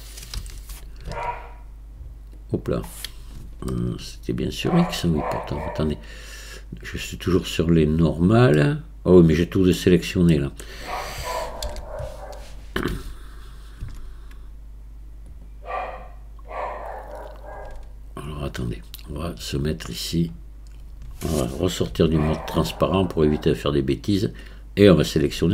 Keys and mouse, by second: 0.4 r, 3.7-5.0 shift+middle drag, 8.6-9.8 middle drag, 10.3 middle click, 11.7 ctrl+z, 12.9 Tab, 13.8 Tab, 15.3 click, 22.0 z, 23.0-24.6 drag.